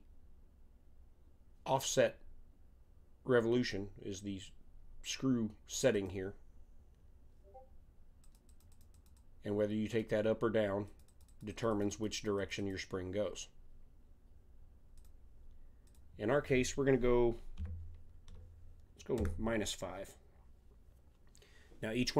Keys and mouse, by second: 5.9-7.7 drag, 8.2-14.2 drag, 14.9-17.8 drag.